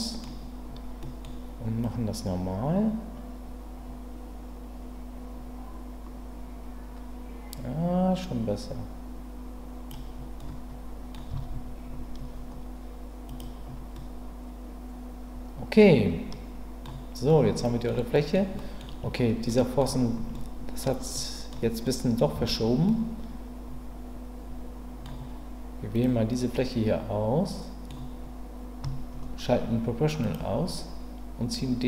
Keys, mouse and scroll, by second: 1.0 middle click, 1.9-9.9 drag, 10.4 middle click, 11.3 Tab, 13.9-16.8 middle drag, 17.3-17.9 middle drag, 18.1 middle click, 18.5 middle click, 19.6 middle click, 20.3-20.8 middle drag, 21.1-21.5 middle drag, 21.8-22.2 middle drag, 22.3 Tab, 22.9-25.0 middle drag, 26.5-27.9 middle drag, 30.2 click, 31.6-31.8 drag.